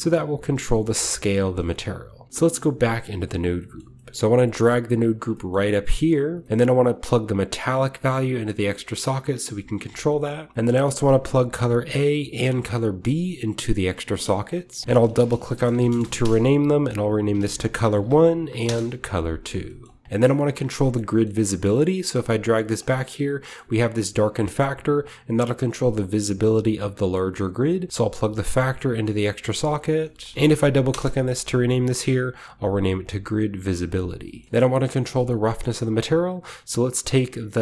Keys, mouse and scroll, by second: 1.3 shift+middle click, 1.5 shift+drag, 1.7 shift+right click, 2.0-4.3 shift+drag, 2.3-2.8 shift+scroll down 1, 2.8-5.3 scroll down 1, 4.1-7.2 typing, 4.3 middle click, 5.5-7.2 drag, 5.9 scroll down 1, 6.4-8.1 scroll up 1, 7.5-9.3 drag, 10.1-10.6 middle drag, 10.2-10.6 scroll up 1, 11.1-11.8 drag, 12.2-12.9 drag, 13.2 click, 14.7 click, 14.8-16.6 typing, 17.0 click, 17.1 ctrl+click, 17.3 ctrl+c, 17.8 ctrl+v, 18.4 BackSpace, 18.5 BackSpace, 18.6 Return, 19.5-20.6 scroll down 2, 19.6 middle click, 20.1-21.9 typing, 20.6-22.9 drag, 20.6 scroll down 1, 22.9-25.5 middle drag, 23.0-25.5 scroll up 2, 23.8 click, 24.4-27.0 drag, 27.0-27.9 middle drag, 27.9-28.8 drag, 29.6 click, 29.7 click, 30.3-31.3 typing, 31.6-34.4 drag, 34.1-34.4 scroll down 1, 34.2 middle click, 34.4 typing, 34.9 click, 36.5 scroll up 2.